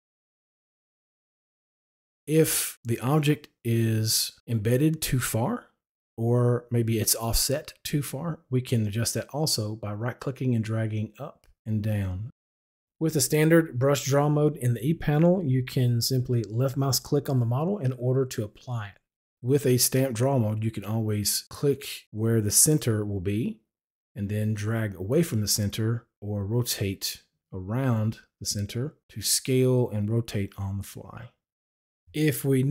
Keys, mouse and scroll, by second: 0.0 right click, 11.0-14.3 right drag, 17.6 click, 19.2-31.3 drag.